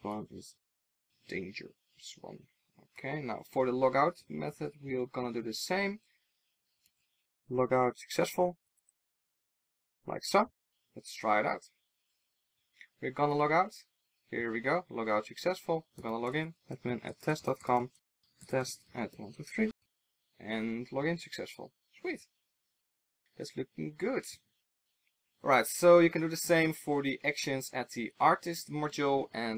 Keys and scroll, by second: 4.4 super+c, 6.3 super+v, 8.8 super+s.